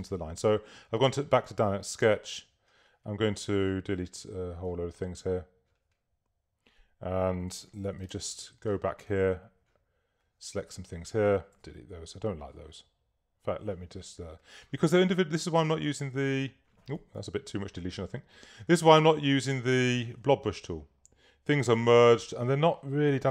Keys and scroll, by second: 7.9 v, 11.5 BackSpace, 16.1 BackSpace, 17.1 super+BackSpace, 17.2 super+z, 20.4 BackSpace.